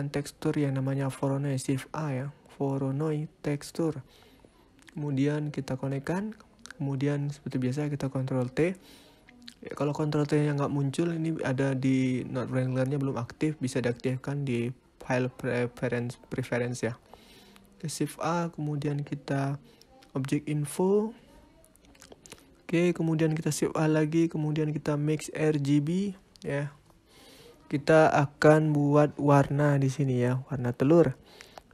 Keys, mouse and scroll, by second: 4.7 click, 6.5 middle click, 7.6 click, 8.9 ctrl+t, 9.3 middle click, 10.3 scroll down 5, 10.5 middle click, 11.4 click, 12.3 click, 13.8 click, 15.0 click, 15.6-16.2 scroll up 2, 16.4 shift+a, 21.3-21.7 scroll up 2, 21.7 click, 22.2 shift+a, 26.3-26.7 scroll up 5, 26.7 middle click, 28.5 click, 29.6 click, 30.3 click.